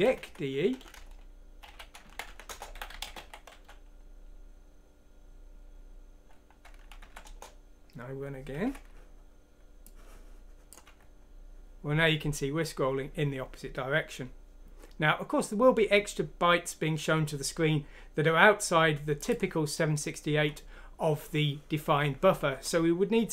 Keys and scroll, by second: 0.0 Down, 0.2 Down, 0.9 Home, 2.2 shift+End, 2.3-4.0 typing, 7.0 F6, 7.2 Return, 8.6 F9, 10.8 F9.